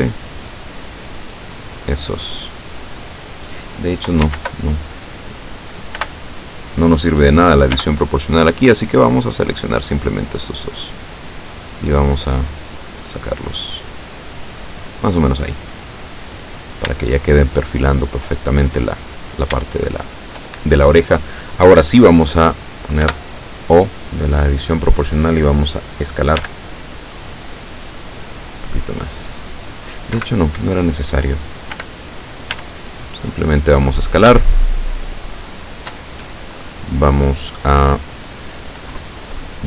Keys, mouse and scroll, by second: 0.5 scroll up 2, 4.3 ctrl+z, 6.0 o, 7.8 b, 8.8-10.0 drag, 10.4-15.1 drag, 15.6-16.2 scroll down 4, 17.1-18.4 shift+middle drag, 19.0 right click, 20.1 shift+right click, 23.1 o, 26.4 s, 28.3-29.0 scroll up 4, 29.0-29.6 scroll down 4, 30.2 Escape, 31.8 o, 32.6 s, 34.0 click, 34.5-36.1 shift+middle drag.